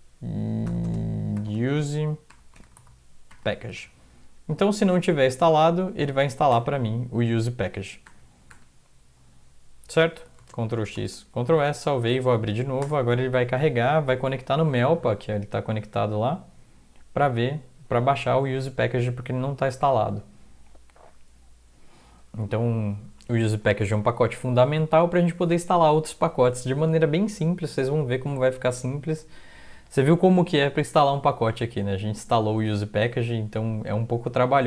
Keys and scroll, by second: 0.8-4.2 typing, 4.4 Right, 4.8 Return, 6.5 BackSpace, 8.0 BackSpace, 8.5 BackSpace, 10.4 ctrl+x, 10.7-13.3 typing.